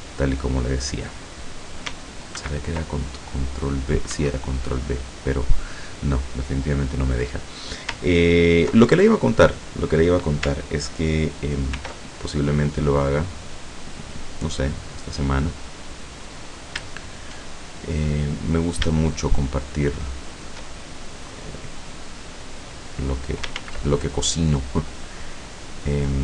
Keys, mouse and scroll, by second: 2.5 ctrl+b, 4.2 Escape, 9.1 ctrl+middle click, 11.8 ctrl+r, 12.8 click, 14.9 click, 16.2 right click, 18.2 click, 18.4 middle click, 19.3 shift+middle click, 20.3 shift+middle click, 20.8 shift+middle click, 21.9-23.5 drag, 23.6 ctrl+z, 25.9 click.